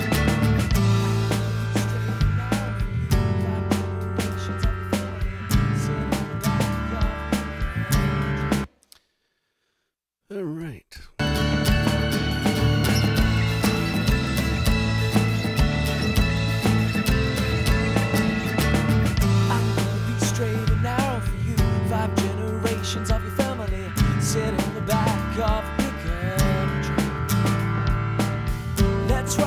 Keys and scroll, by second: 8.4 space, 11.0 alt+space, 11.9 space.